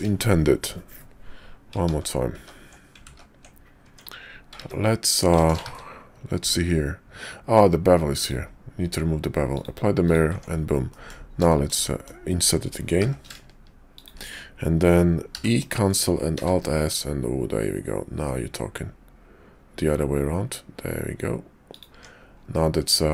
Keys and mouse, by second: 2.1 ctrl+z, 2.3 ctrl+z, 3.4 ctrl+z, 3.8 Tab, 5.7 ctrl+`, 10.3 Tab, 10.9 click, 11.5 shift+click, 11.8 click, 13.0 i, 15.2 e, 16.3 alt+s, 21.9 Tab, 22.7-23.1 drag.